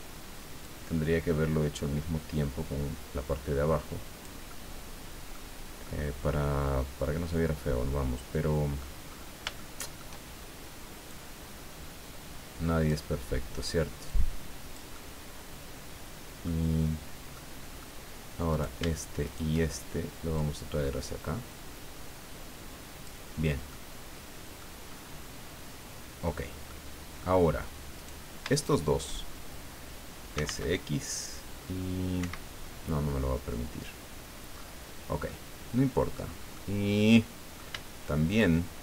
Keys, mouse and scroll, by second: 0.6-4.4 drag, 4.5-5.5 middle drag, 5.8-9.0 middle drag, 9.1-9.5 scroll up 3, 9.5 shift+middle click, 11.1-13.1 drag, 14.0-16.6 drag, 14.9-16.6 middle drag, 17.3 middle click, 18.5 shift+right click, 19.2 shift+right click, 20.4-23.2 drag, 23.4 scroll down 1, 23.7-24.8 middle drag, 24.8-25.3 scroll up 1, 26.7 middle click, 28.0 right click, 28.5 shift+right click, 30.1-30.9 typing, 32.2 Escape, 33.6 scroll down 2, 34.5-34.9 scroll up 2, 35.3-36.4 drag, 36.5-37.7 drag.